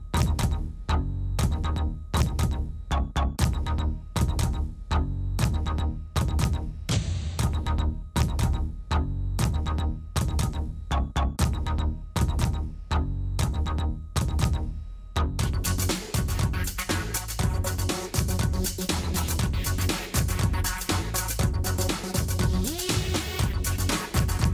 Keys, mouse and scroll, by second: 0.6-1.6 drag, 2.6 n, 3.2 click, 5.6 click, 5.6 s, 7.7-8.2 drag, 8.8 s, 10.6 s, 12.1 click, 13.7 middle click, 14.9 middle click, 15.7 s, 18.4 s, 21.3 s, 23.8 Tab, 24.0 click.